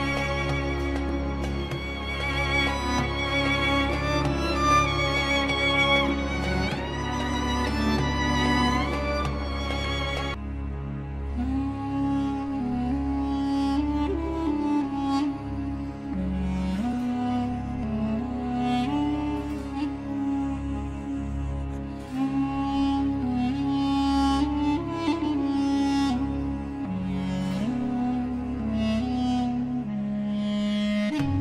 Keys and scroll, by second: 4.3 F3, 9.3 ctrl+r, 9.9 F3, 10.5 Escape, 16.9 ctrl+z, 27.4 ctrl+r, 30.3 shift+Page_Up.